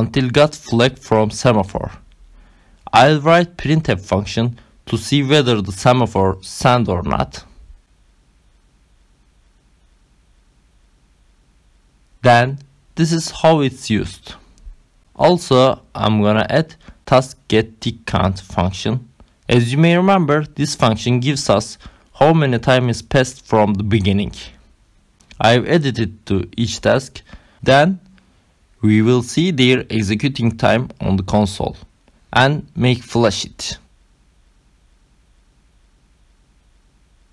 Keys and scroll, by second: 0.2 Left, 0.9 Right, 1.1 Up, 1.8-2.9 typing, 3.4 Down, 6.1-7.5 typing, 9.4-12.7 typing, 14.0 Right, 14.8 shift+,, 15.3 Left, 16.5 Left, 17.7 Left, 18.5 space, 19.0 Left, 19.7 space, 20.5 ctrl+alt+8, 20.9-24.8 typing, 26.3 n, 27.2 ctrl+c, 27.9 ctrl+v, 29.5 s, 29.9 ctrl+z, 30.1 Left, 31.2-33.6 typing, 34.2 ctrl+s, 36.0 Up, 36.2 Return.